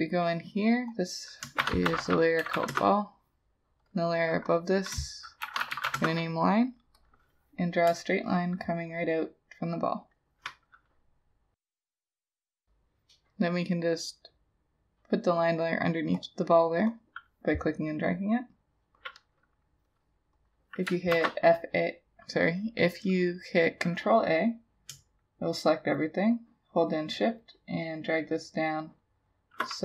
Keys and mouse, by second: 1.6 shift+b, 1.9 a, 2.4 l, 2.6 l, 2.7 Return, 4.5 double click, 5.5 shift+l, 5.7 i, 5.8 n, 5.9 shift+e, 6.0 Return, 8.2 shift+click, 21.2 ctrl+a, 27.1 shift+click.